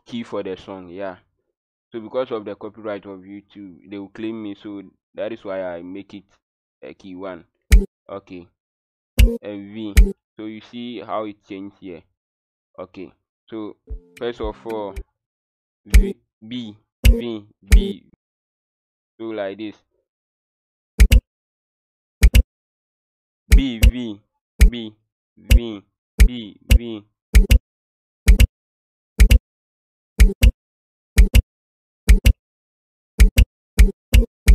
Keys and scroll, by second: 7.6 b, 9.1 v, 9.9 b, 13.8 w, 15.0 q, 15.8 b, 16.9 v, 21.0-25.5 typing, 26.7-34.5 typing.